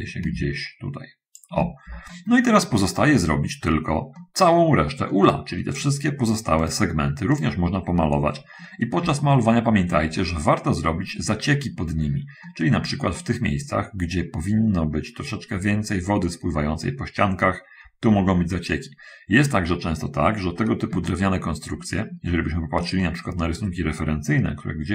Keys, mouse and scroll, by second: 2.7-4.3 middle drag, 6.0 right click, 6.5 right click, 7.6 right click, 8.7 scroll up 1, 9.4 shift+middle click, 10.4-12.5 shift+middle drag, 13.4 middle click, 15.3 scroll up 1, 21.3 shift+middle click, 22.7 shift+scroll down 2, 23.1 shift+click.